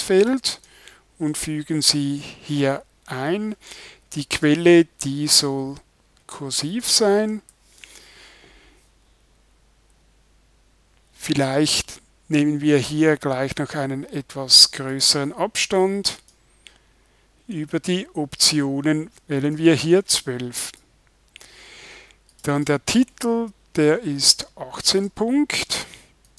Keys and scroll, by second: 1.3 super+v, 7.4 super+i.